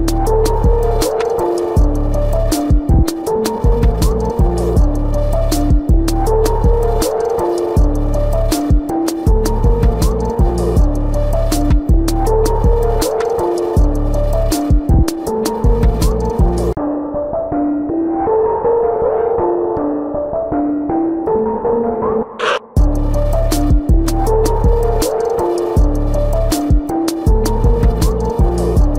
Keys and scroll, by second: 1.1 ctrl+=, 1.5 ctrl+alt+z, 5.7 ctrl+=, 13.4 ctrl+=, 13.8 ctrl+alt+z, 14.9 ctrl+alt+z, 15.1 ctrl+alt+z, 18.0 ctrl+alt+z, 18.7 space, 23.2 space, 24.0 space, 26.5 space, 28.3 space.